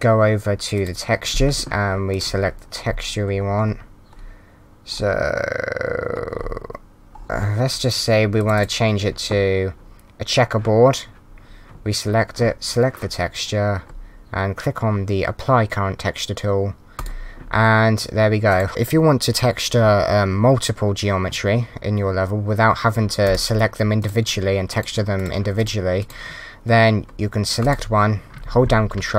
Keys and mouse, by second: 1.8 click, 2.1 click, 8.4 click, 16.9 click, 18.5 click, 23.2 click, 27.6 click.